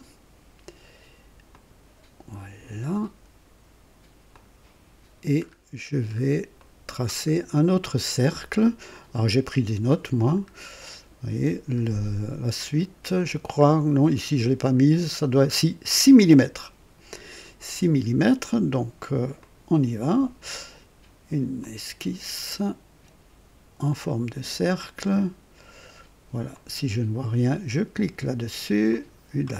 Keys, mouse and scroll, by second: 1.5 click, 4.3 click, 5.4-6.3 scroll up 2, 6.5-7.1 right drag, 7.3 scroll up 2, 8.9 click, 10.9 scroll down 2, 11.7 scroll up 2, 13.0 scroll up 2, 13.6-14.0 scroll down 2, 14.6 scroll down 2, 19.4 click, 21.5 click, 23.8 click, 26.5 click, 28.8 click.